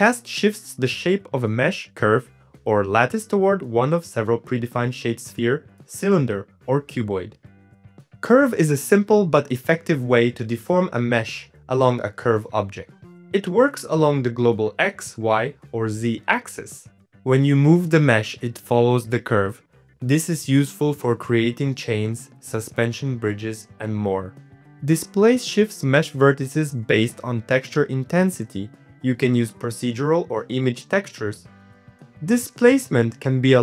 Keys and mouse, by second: 0.7-3.2 shift+drag, 3.6-5.3 shift+drag, 5.4 click, 6.3 middle click, 7.0-8.6 shift+drag, 9.1 click, 11.2-12.2 drag, 12.5 middle click, 12.8 Tab, 13.3 Tab, 13.3 click, 14.7 shift+middle click, 14.8 Tab, 15.4 Tab, 15.5 g, 17.4 middle click, 17.8-23.4 typing, 18.2 click, 19.3 middle click, 20.6 click, 21.5 click, 22.4 click, 23.2 click, 23.9 Tab, 23.9 middle click, 24.1 click, 24.3 middle click, 24.4 click, 24.6 click, 24.6 middle click, 25.0 click, 27.4 click, 28.3-29.4 drag, 31.7-33.6 shift+drag.